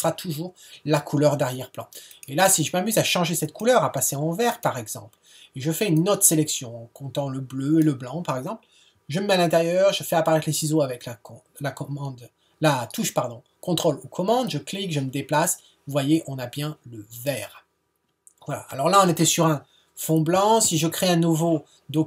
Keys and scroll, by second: 20.6 super+n.